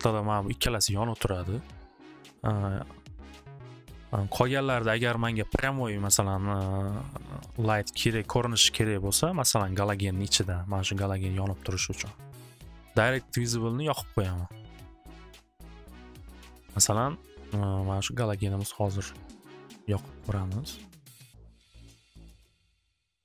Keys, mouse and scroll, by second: 11.8-13.3 middle drag, 15.4 click, 15.9 click, 16.6 click, 18.7 click, 19.5 middle click, 22.2 click.